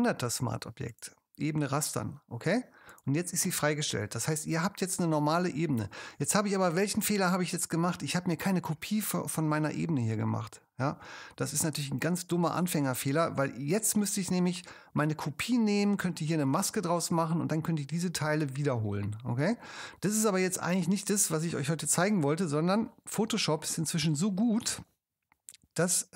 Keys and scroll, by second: 22.0 alt+super+z, 24.0 alt+super+z.